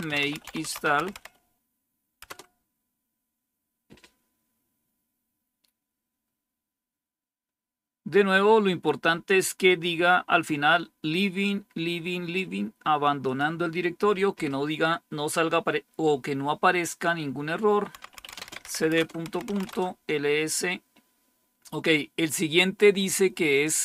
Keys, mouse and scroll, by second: 0.0-1.6 typing, 2.1 Return, 3.4 typing, 13.1-17.9 drag, 17.6-19.5 typing, 23.4 click.